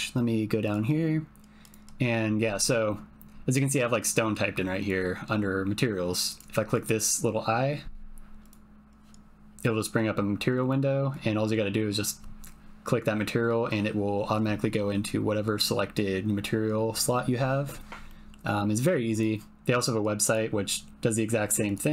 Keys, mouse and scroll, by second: 0.6 click, 1.6-6.3 drag, 6.7 click, 18.0-19.1 middle drag, 19.1 click, 19.2-21.8 middle drag.